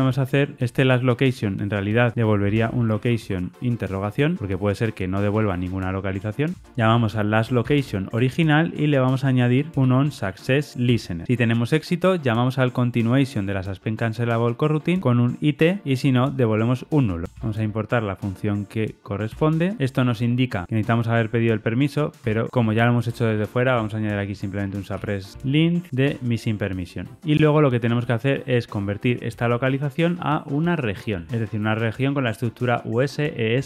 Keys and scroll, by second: 0.5 Escape, 5.4 alt+Return, 8.1 Return, 10.8 Return, 19.2 Return, 20.6 alt+Return, 21.4 alt+Return, 25.9 Escape, 26.0 Tab.